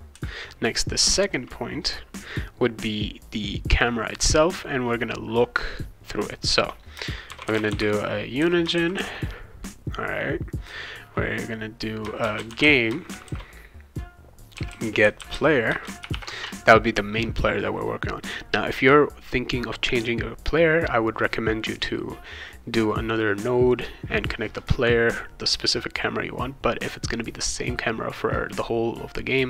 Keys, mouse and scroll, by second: 7.0-9.5 typing, 11.9-16.6 typing.